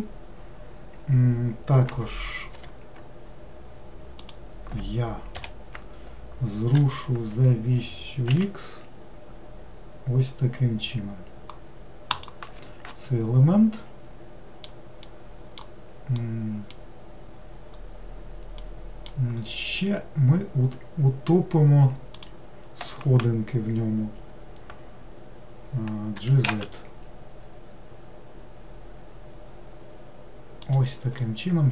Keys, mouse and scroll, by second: 4.3 click, 6.8 g, 12.9-17.8 middle drag, 17.8-18.6 scroll up 1, 18.6 middle click, 19.4-22.2 scroll up 2, 22.2 click, 26.2 g, 31.2-31.7 middle drag.